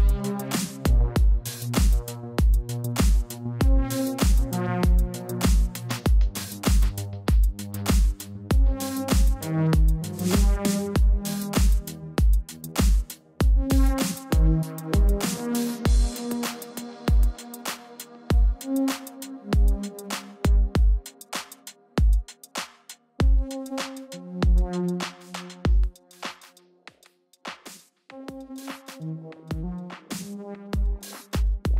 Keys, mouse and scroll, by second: 0.6 click, 1.0 ctrl+Escape, 1.4 ctrl+t, 2.8 click, 5.8 click, 9.7 Return, 10.3 click, 12.2 ctrl+t, 13.5 click, 19.6 Return, 20.9 click, 24.4 click, 25.0 right click, 26.1 click, 27.1 click, 28.8 ctrl+t, 29.9 ctrl+alt+shift+click, 30.4 ctrl+alt+shift+click, 30.8 alt+click, 31.6 ctrl+alt+shift+click.